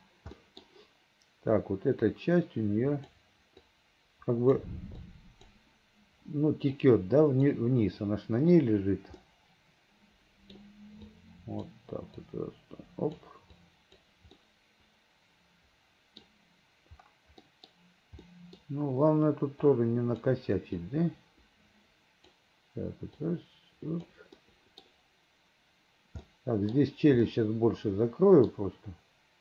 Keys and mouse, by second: 0.5 middle click, 2.2-3.3 drag, 3.8 click, 5.1 click, 6.9 click, 9.3-10.6 middle drag, 11.2 click, 12.3-13.3 drag, 13.7 click, 14.4-16.3 middle drag, 17.5 middle click, 18.4 middle click, 19.8 click, 20.9-22.4 drag, 23.3 click, 24.5 click, 26.4 click, 27.3-28.6 drag.